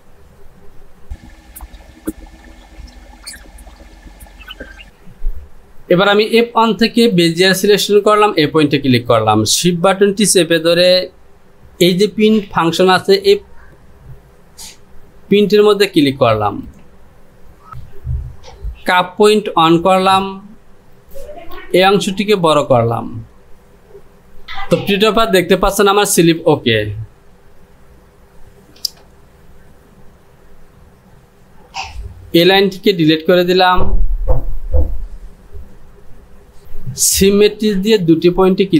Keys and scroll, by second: 21.8 Return, 27.3 Home, 31.9 Delete.